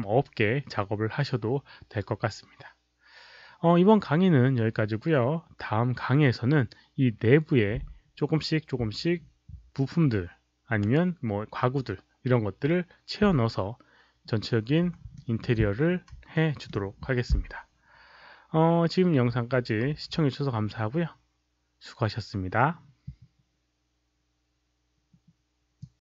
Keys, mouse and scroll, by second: 15.2 alt+middle click, 16.3 alt+middle click, 19.1 alt+middle click, 24.4 alt+middle click, 25.8 click.